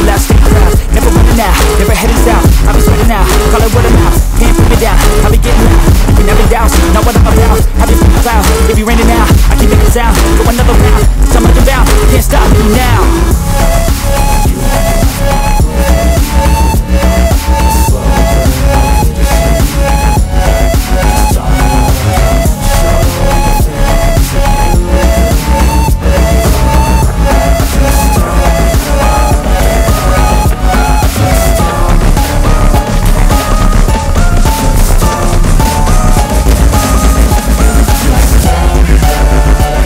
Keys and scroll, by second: 17.6 F3, 18.0 Escape, 22.5 ctrl+k, 31.7 ctrl+g, 32.5 r, 32.9 Escape, 37.6 Escape, 39.2 F4, 39.6 Escape.